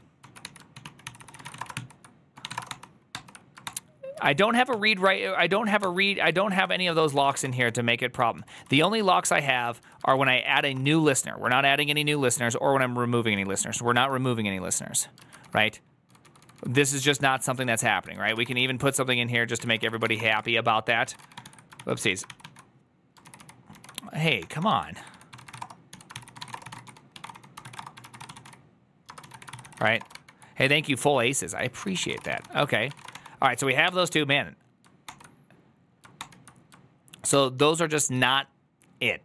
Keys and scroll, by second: 0.1 ctrl+w, 0.3 h, 0.6 ctrl+w, 0.7 ctrl+o, 0.9 ctrl+c, 1.3 ctrl+c, 1.3 ctrl+:, 1.4-2.8 typing, 1.6 ctrl+t, 3.0 ctrl+d, 4.6 ctrl+u, 4.6 ctrl+t, 5.4 ctrl+n, 6.5 ctrl+h, 6.5 ctrl+s, 6.8-13.2 typing, 9.9 ctrl+c, 14.8-22.7 typing, 19.4 Tab, 19.7 ctrl+c, 23.1 ctrl+i, 23.2 ctrl+i, 24.2 ctrl+d, 24.4 ctrl+d, 24.6-30.2 typing, 30.9 alt+{, 31.6-33.2 typing, 33.7 ctrl+d, 36.0 ctrl+d.